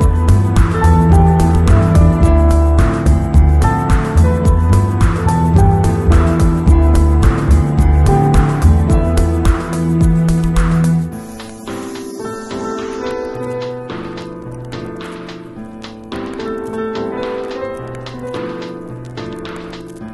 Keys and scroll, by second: 4.4 Return, 14.0 b, 17.1 z, 18.5 b, 19.7 [.